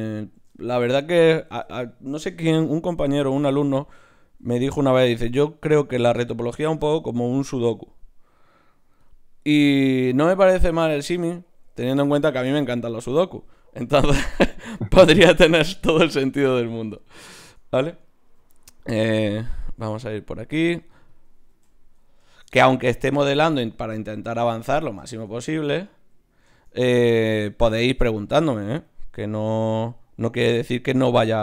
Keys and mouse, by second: 0.5 middle click, 1.9-3.0 middle drag, 4.1 d, 4.1-6.3 drag, 7.0 shift+q, 9.8 middle click, 12.5 Tab, 13.9 f, 14.5-16.1 drag, 16.3 Tab, 16.8-18.4 drag, 18.4 n, 21.1 click, 21.5 n.